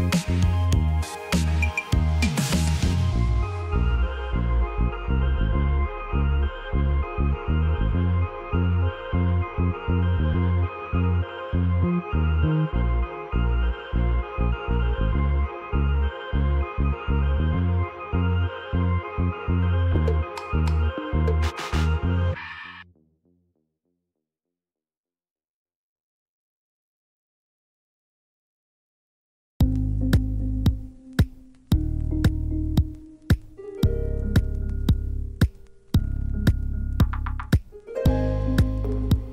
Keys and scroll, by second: 0.2 Delete, 1.1 Delete, 2.7 t, 4.6 typing, 5.0 Return, 6.9 \, 7.9 p, 10.0 \, 11.4 Delete, 15.1 typing, 15.4 Return, 16.3 l, 18.7 \, 20.6 p, 24.3 \, 25.3 Delete, 33.5 r, 37.6 \, 38.8 l.